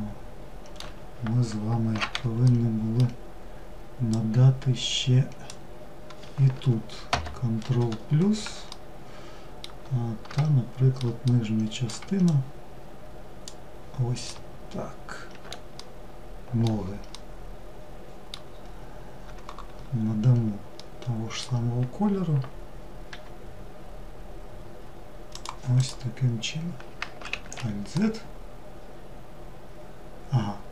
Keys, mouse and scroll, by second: 1.2 alt+z, 1.7-3.3 middle drag, 3.3 click, 6.3 ctrl+KP_Add, 7.9-11.5 shift+middle drag, 11.5 shift+drag, 13.5-15.0 shift+middle drag, 16.3-17.7 middle drag, 17.7 scroll down 2, 20.0-22.3 middle drag, 22.3 g, 25.0 click, 27.1-30.2 middle drag.